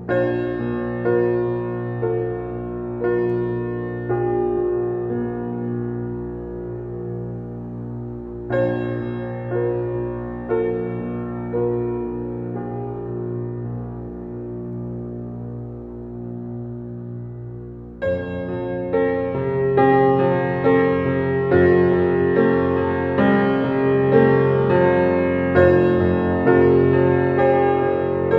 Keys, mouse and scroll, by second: 1.7 scroll down 1, 2.6-3.2 typing, 12.2-14.1 typing, 16.8 click, 19.9-20.3 scroll up 1, 20.8 click, 25.9-27.7 typing.